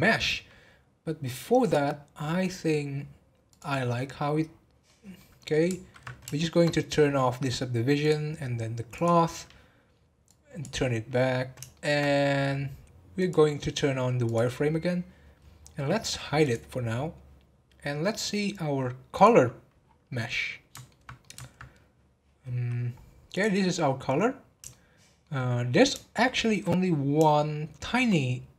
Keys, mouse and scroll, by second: 1.7 click, 3.5 click, 4.5-4.8 scroll down 2, 4.8-6.1 middle drag, 6.1 scroll down 2, 6.3 shift+middle click, 7.0-8.0 scroll up 2, 8.0 scroll up 2, 8.0 click, 8.9 click, 10.3-11.3 drag, 11.3-11.7 scroll down 1, 11.7-13.1 shift+middle drag, 13.1-15.3 drag, 15.3-15.7 scroll up 1, 16.3 scroll up 2, 16.4 click, 19.1 click, 19.8 scroll down 1, 20.3-22.4 middle drag, 22.4 scroll up 1, 23.3 click, 24.6-25.6 shift+middle drag, 25.6 scroll up 2, 26.1-26.8 shift+middle drag, 26.8 scroll up 2, 27.4-28.5 shift+middle drag.